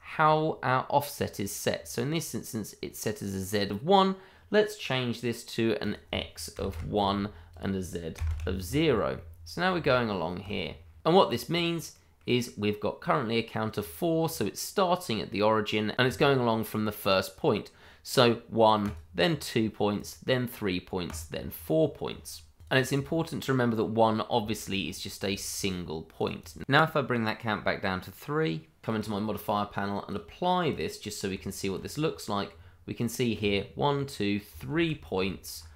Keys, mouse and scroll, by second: 5.8 click, 6.5 1, 6.7 Return, 7.5 click, 8.1 0, 8.2 Return, 9.1 middle click, 10.0 shift+middle click, 10.0 middle click, 10.3-10.7 scroll up 1, 10.7 shift+middle click, 10.8 middle click, 10.9 shift+middle click, 11.4 scroll down 1, 11.9 middle click, 18.8 click, 22.8 double click, 24.5 middle click, 24.5 shift+middle click, 24.8-25.3 scroll up 1, 25.3 shift+middle click, 25.4 middle click, 26.1 click, 26.5 double click, 28.9 click, 31.3 Tab, 32.0-32.5 scroll up 1, 32.5-34.5 scroll down 1, 34.7 ctrl+z.